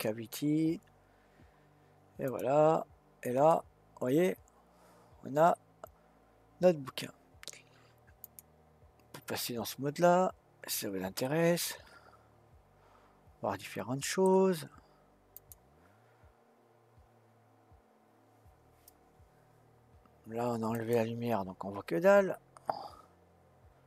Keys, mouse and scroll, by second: 2.2 click, 3.5-6.5 middle drag, 8.8 click, 10.0-10.5 scroll down 2, 10.5 scroll up 2, 11.2-14.2 middle drag, 15.4 click, 20.7 click.